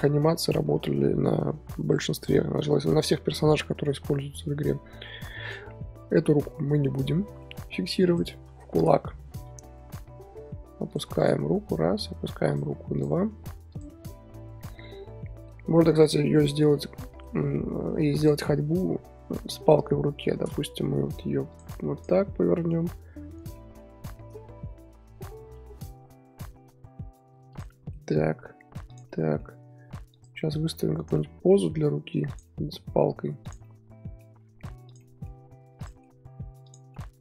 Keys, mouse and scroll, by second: 0.6 KP_1, 1.1-2.7 scroll up 3, 2.7-4.1 scroll up 1, 4.1 scroll up 1, 5.4 click, 6.1-8.1 middle drag, 8.1 click, 8.3 KP_1, 9.4 r, 10.7 r, 11.2 click, 11.4 r, 13.0 click, 13.2 r, 14.2 z, 14.7 scroll down 3, 14.9-18.2 middle drag, 18.2 click, 18.7 scroll up 2, 19.5 KP_3, 20.7 r, 21.9 click, 22.1-22.8 middle drag, 22.8 r, 23.5 middle click, 23.9 r, 27.7 middle click, 28.1 r, 29.1-30.1 middle drag, 30.1 click, 30.6 r, 31.1-31.8 middle drag, 31.8 r, 32.4-33.0 middle drag, 33.0 r, 33.6-34.4 middle drag, 34.4 r, 35.0-35.4 middle drag, 35.4 r, 35.9-36.6 middle drag, 36.6 click, 36.9-37.2 middle drag.